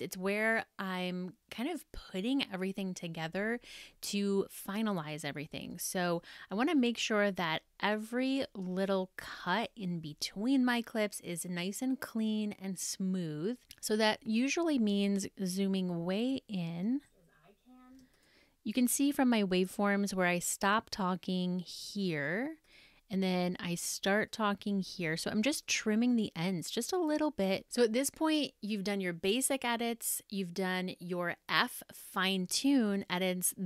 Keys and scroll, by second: 5.5 super+=, 14.0 super+=, 16.5 super+space.